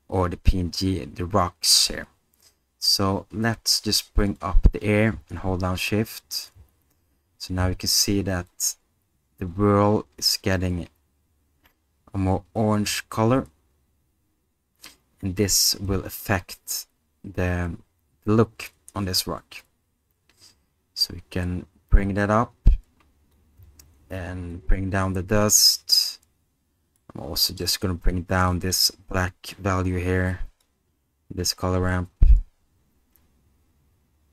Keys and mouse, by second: 4.5-6.5 drag, 8.5-15.5 drag, 22.7 click, 24.6-25.9 drag, 27.0 middle click, 28.6 middle click, 29.6-30.6 drag.